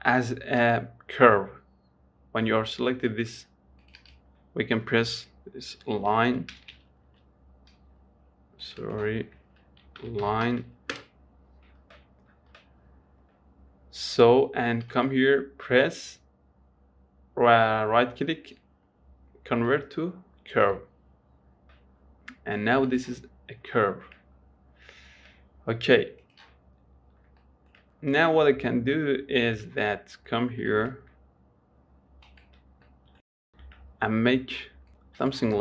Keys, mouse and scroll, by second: 0.9-4.1 right drag, 4.1 click, 4.3-7.4 drag, 8.9 click, 9.2-12.2 drag, 15.2-18.4 right drag, 21.4-21.7 scroll down 1, 21.7-23.2 scroll up 1, 23.2 click, 23.7-24.2 scroll down 1, 24.2 shift+middle click, 24.8-25.2 scroll down 1, 25.3-26.5 scroll up 2, 26.5 click, 27.3-27.7 scroll up 1, 27.7 shift+middle click, 28.6 scroll down 1, 28.9 shift+middle click, 29.4 scroll up 1, 29.6 shift+middle click, 30.4 shift+right click, 30.7 middle click, 31.2 shift+a, 32.2 s, 33.5 scroll down 5, 33.7-34.1 scroll up 8, 34.1-35.2 shift+middle drag, 35.2 s.